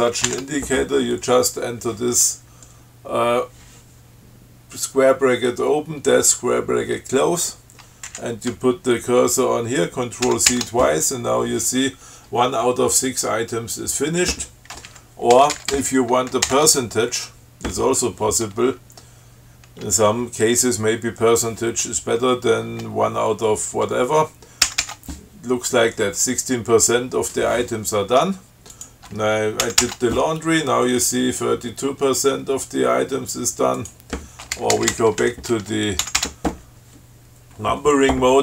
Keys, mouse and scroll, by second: 0.0 shift+7, 0.5 alt+shift+7, 0.5 alt+shift+9, 8.3 Left, 10.5 ctrl+c, 15.1 Left, 15.6 BackSpace, 16.7 shift+5, 24.9 ctrl+c, 29.0 click, 29.9 ctrl+c, 34.0 click, 34.8 BackSpace, 35.5 shift+7, 36.3 ctrl+c.